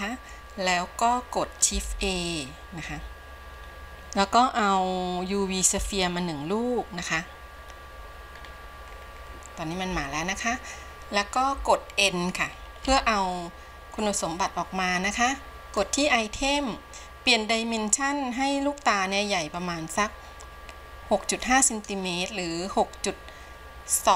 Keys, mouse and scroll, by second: 3.1 shift+a, 8.5-8.9 scroll down 2, 9.2-9.7 scroll down 5, 10.2 scroll down 1, 13.4 n, 15.8-20.8 drag, 21.7-24.1 drag.